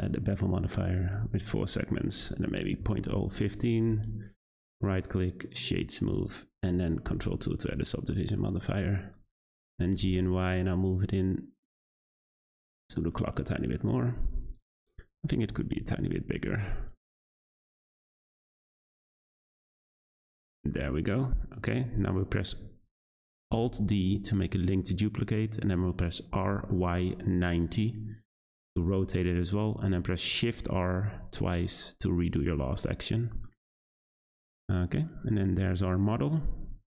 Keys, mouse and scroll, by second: 0.8 click, 1.9-4.7 drag, 4.7-5.9 right drag, 5.9 click, 7.0 ctrl+2, 7.5 click, 8.1-8.5 middle drag, 8.5-8.9 scroll down 3, 8.9-9.3 middle drag, 9.3 scroll up 2, 9.6 g, 12.6 click, 12.9 scroll down 1, 13.1-14.5 middle drag, 14.5 click, 14.9 scroll up 2, 15.1 scroll down 1, 15.2 Tab, 15.4 a, 15.5 s, 17.7 g, 19.4 scroll down 2, 19.4 Tab, 19.9-21.8 middle drag, 21.8-23.5 scroll up 1, 23.5 alt+d, 30.5 shift+r, 31.0 shift+r, 31.7 click, 32.8-33.5 middle drag, 33.5-34.1 scroll down 3, 34.1-36.9 middle drag.